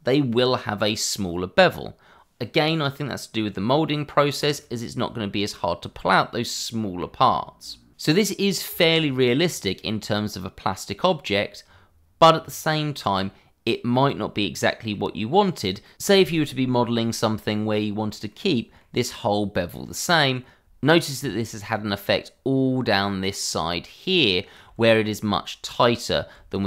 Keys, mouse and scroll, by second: 9.5-9.8 scroll down 1, 9.8 middle click, 11.6-12.0 scroll up 1, 12.4-14.4 scroll down 1, 14.6 middle click, 15.0-15.5 scroll up 1, 15.5 middle click, 16.0-16.4 scroll up 1, 16.4 shift+middle click, 16.5 middle click, 16.6 shift+middle click, 18.4 middle click, 20.6-21.1 scroll up 1, 21.1 middle click, 21.9 d, 22.8 click.